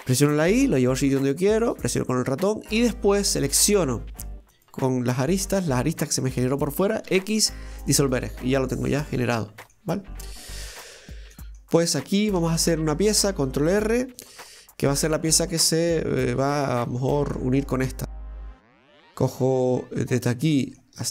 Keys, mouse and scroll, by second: 3.4 right click, 4.6 click, 5.5 right click, 5.8 alt+shift+right click, 6.0 alt+shift+right click, 7.1 x, 8.6-9.1 scroll down 1, 9.1 middle click, 9.8 scroll down 1, 10.4-11.9 middle drag, 11.9 right click, 12.4 Tab, 15.4 scroll down 1, 15.5-19.1 middle drag, 19.1 click, 20.1 right click, 20.5 middle click.